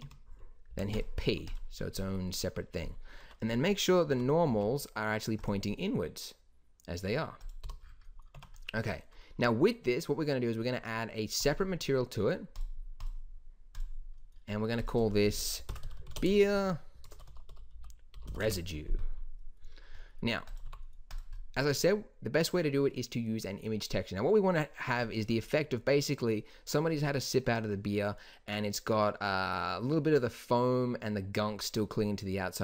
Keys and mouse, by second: 0.6 p, 1.2 Tab, 3.2 Tab, 4.2 a, 4.4 n, 5.8-7.1 middle drag, 7.5 click, 7.6 n, 8.3 Tab, 14.1-15.9 drag, 15.9 e, 20.6 g.